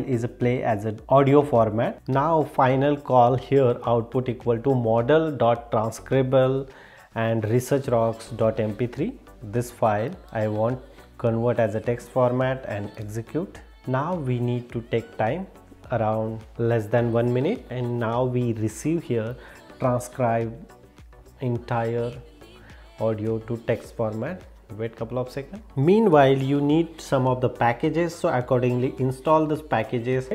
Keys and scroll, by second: 30.2 super+e.